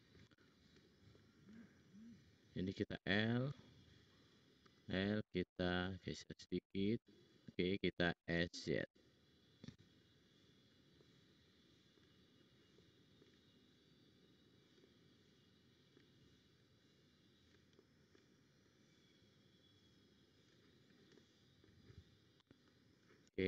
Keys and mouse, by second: 1.6 middle click, 3.5 l, 4.1 click, 4.6 l, 5.4-7.7 drag, 8.1 s, 10.2 click, 11.0 middle click, 14.0 click, 14.0 middle click, 14.0 right click, 14.2 click, 14.2 middle click, 14.2 right click, 16.7 click, 21.1 middle click, 23.3 click.